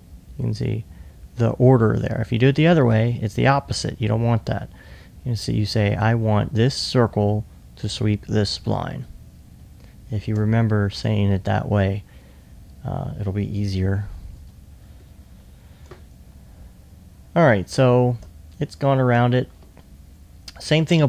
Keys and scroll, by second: 14.4 typing, 15.9-16.7 typing, 19.7 alt+1, 20.6 alt+2.